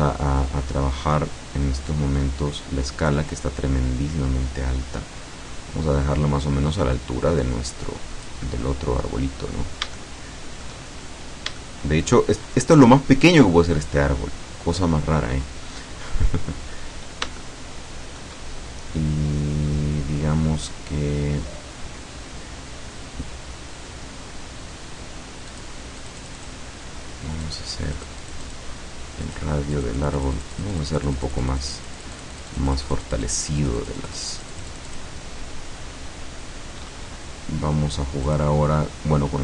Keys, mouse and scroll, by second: 0.3-1.0 scroll up 2, 2.5 scroll down 1, 3.2-8.5 drag, 9.5 scroll up 1, 10.1 shift+middle click, 11.5 scroll up 1, 11.7 shift+middle click, 16.8-17.5 scroll up 1, 17.5 shift+middle click, 25.5 click, 26.1 click, 27.5 click, 28.0 click, 29.3 click, 29.8-35.3 drag, 38.3 click.